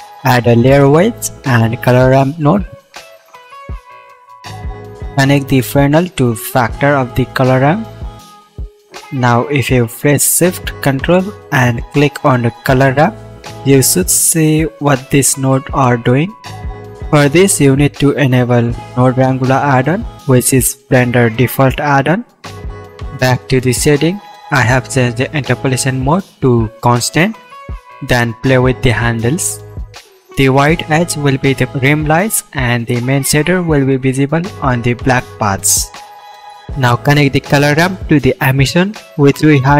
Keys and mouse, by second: 0.6-1.2 shift+middle drag, 0.9 shift+a, 3.5-4.7 middle drag, 8.5-10.3 middle drag, 11.3-29.7 drag, 34.3-39.7 drag.